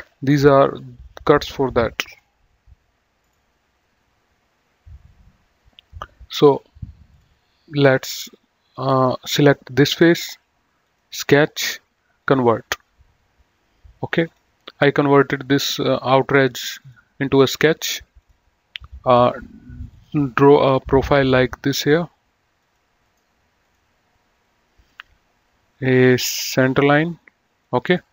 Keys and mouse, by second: 7.1 click, 7.9 middle click, 9.4 click, 10.8 click, 12.0 click, 14.1 click, 15.5 click, 16.7 click, 18.2 click, 19.8 click, 22.6 click, 23.0 right click, 23.5 click, 24.9 click, 26.1 click, 27.8 right click.